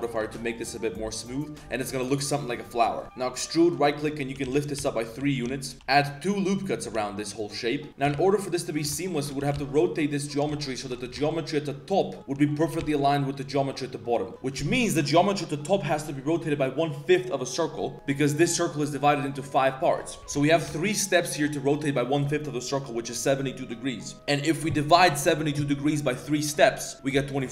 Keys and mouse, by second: 0.2 ctrl+2, 0.6-1.4 drag, 1.4 middle click, 1.8 middle drag, 2.4 middle drag, 3.0 ctrl+z, 3.0 g, 3.3 g, 4.2 g, 5.2 shift+click, 5.4 z, 5.5 click, 5.8 Tab, 5.8 ctrl+r, 5.8 shift+w, 7.0-7.7 drag, 7.0 z, 7.9 ctrl+z, 7.9 r, 8.0 r, 9.1 alt+shift+click, 9.4 r, 10.8 alt+shift+right click, 11.0 r, 12.4 click, 12.6 g, 16.1 click, 17.8 middle click, 19.2 middle click, 20.2 ctrl+z, 20.2 2, 20.5 alt+click, 20.8 alt+shift+click, 21.3 alt+shift+click, 21.5 click.